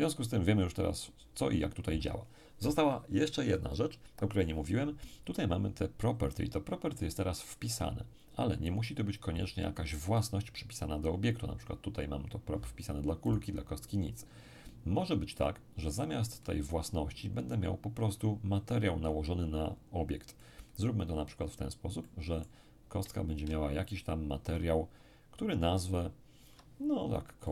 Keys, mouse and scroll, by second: 10.2 right click, 13.2 right click, 15.3-17.8 middle drag, 20.3-25.4 middle drag, 23.4-25.4 ctrl+drag, 25.9-27.4 ctrl+drag, 27.4-27.5 ctrl+middle drag.